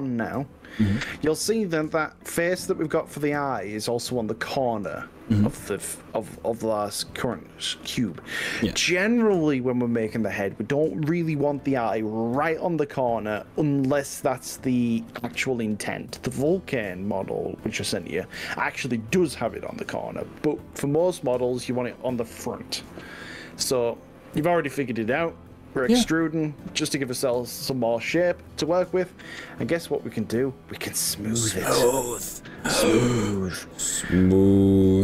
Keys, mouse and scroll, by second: 17.9 e, 24.4 click, 32.8 click.